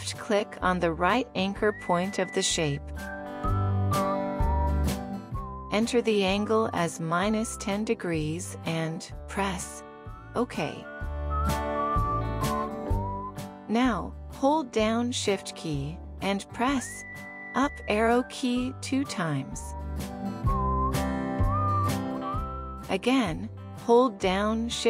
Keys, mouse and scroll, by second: 1.4 alt+click, 16.9 shift+Up, 18.4 shift+Up.